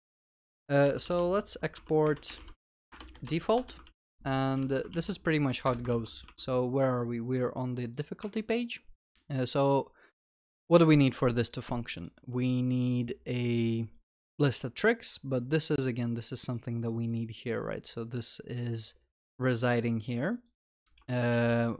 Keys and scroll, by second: 1.8 Tab, 2.9 Return, 3.8 Return, 3.9 ctrl+s, 4.9 ctrl+alt+l, 5.0 ctrl+s, 8.3 ctrl+s, 21.4 ctrl+s.